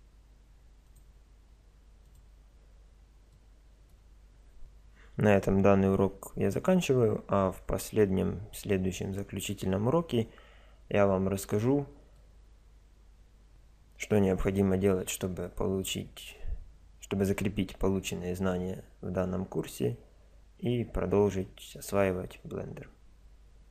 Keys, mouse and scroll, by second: 3.3-4.6 middle drag, 12.2-23.7 middle drag.